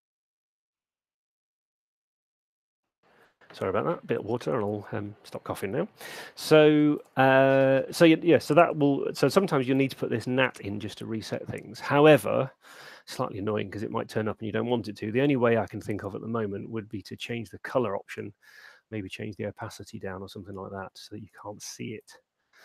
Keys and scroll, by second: 12.9 super+9, 15.3 super+8.